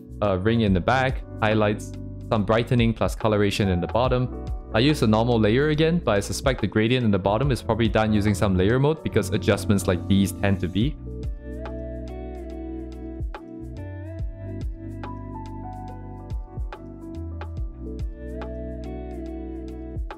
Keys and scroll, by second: 4.1 ctrl+z, 10.3 ctrl+z, 16.4 ctrl+z.